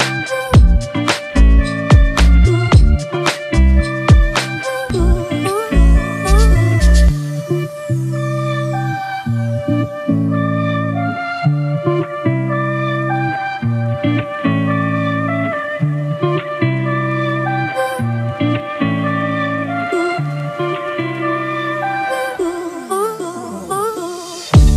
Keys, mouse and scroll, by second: 4.4-4.7 typing, 10.6 right click, 12.0 [, 13.9 double click, 18.0 right click, 19.2 double click.